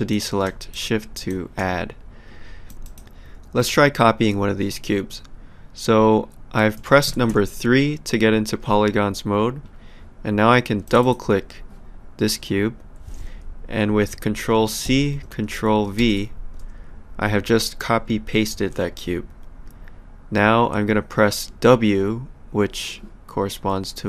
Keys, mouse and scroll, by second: 0.7 shift+click, 2.7 click, 6.5-7.8 typing, 10.8 click, 14.9 ctrl+c.